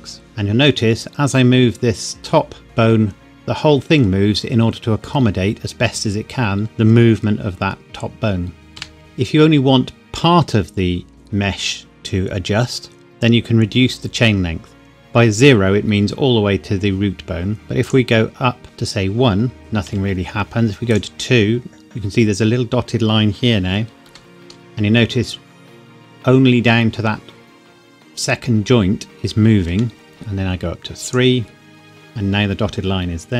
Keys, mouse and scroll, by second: 0.2 g, 8.8 Escape, 17.8 click, 19.6 g, 19.9 Escape, 20.9 click, 24.1 g, 29.7 Escape, 31.1 click.